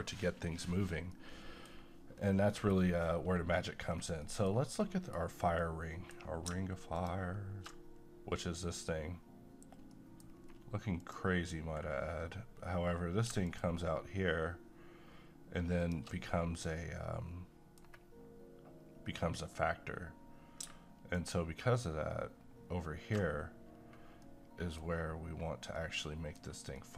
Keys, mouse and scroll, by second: 1.1-2.8 middle drag, 2.8-3.2 scroll up 1, 3.8-4.2 scroll down 1, 4.2-6.9 middle drag, 6.9 ctrl+shift+click, 9.9 middle click, 10.4-11.1 scroll up 1, 11.1 click, 13.4 click, 15.8 ctrl+click, 16.3-21.1 middle drag, 21.1 ctrl+shift+click, 23.7 scroll up 1, 24.2-26.8 middle drag.